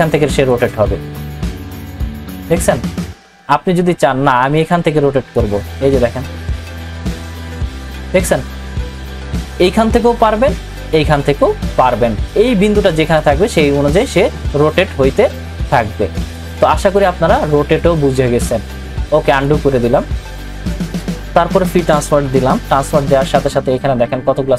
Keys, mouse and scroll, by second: 12.3 click, 16.3-19.3 drag, 22.0 ctrl+t.